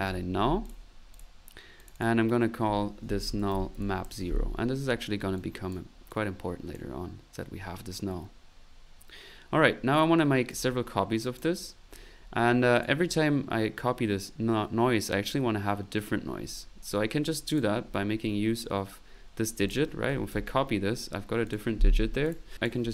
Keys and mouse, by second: 0.0-0.6 typing, 0.7 click, 1.1 click, 1.8 click, 2.3 click, 4.7 middle click, 5.4-6.9 drag, 9.9 right click, 11.2 click, 11.8 middle click, 12.8 click, 17.5 click, 18.2 middle click, 19.7 click, 19.7-20.8 typing, 21.4 ctrl+click, 22.2 Delete, 22.2 click.